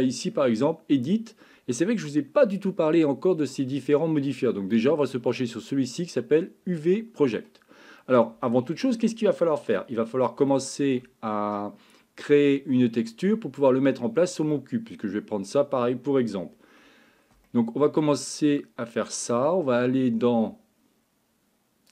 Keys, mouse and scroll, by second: 8.0-9.0 middle drag, 10.5 shift+middle click, 14.6-15.8 middle drag, 17.5 shift+middle click, 18.6 middle click.